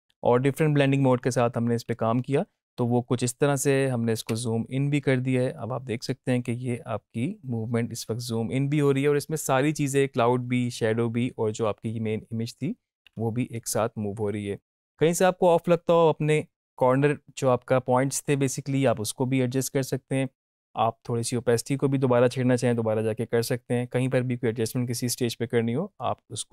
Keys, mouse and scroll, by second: 4.2 space, 14.8 space.